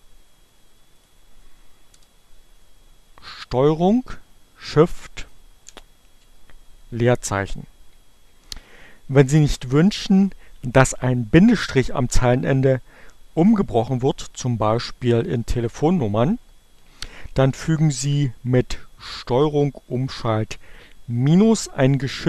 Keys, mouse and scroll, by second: 0.1 click, 1.2 BackSpace, 4.7 ctrl+shift+space.